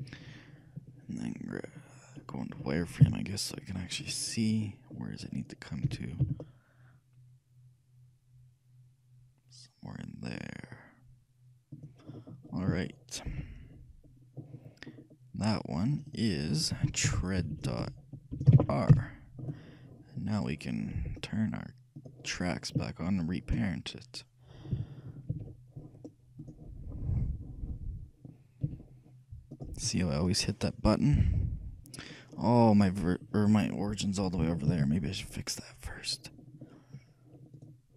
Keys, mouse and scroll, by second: 3.1 z, 4.7-6.0 scroll up 1, 6.0-6.7 scroll up 1, 6.0 g, 6.7 middle click, 13.0-14.7 shift+middle drag, 16.1-18.0 drag, 17.6 BackSpace, 17.7 BackSpace, 22.0-24.0 drag, 23.1-24.9 shift+right drag, 26.6 ctrl+o, 26.6-28.1 drag, 28.8 ctrl+p, 31.3-32.4 middle drag, 32.4-33.4 scroll down 1, 33.4 scroll up 1, 33.6 middle click, 34.2 scroll down 1, 34.4-37.3 ctrl+middle drag, 34.9 ctrl+z, 37.8-37.9 right drag.